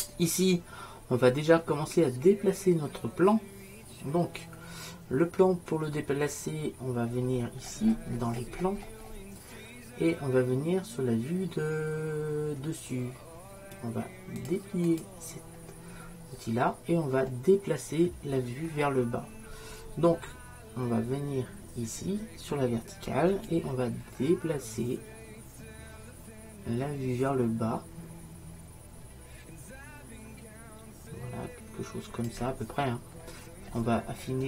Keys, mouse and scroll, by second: 3.6-7.4 middle drag, 14.2 middle click, 14.5-17.2 drag, 17.2-19.6 middle drag, 23.6-33.3 drag, 33.3 middle click.